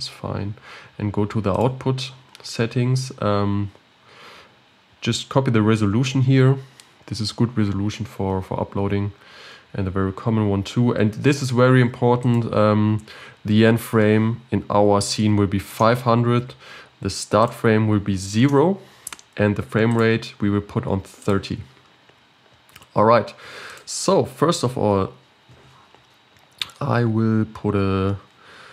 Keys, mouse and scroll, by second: 2.0 click, 12.2-15.7 drag, 15.7 0, 17.4-24.2 drag, 24.9 KP_7, 25.9-26.7 scroll up 4, 26.7 shift+a.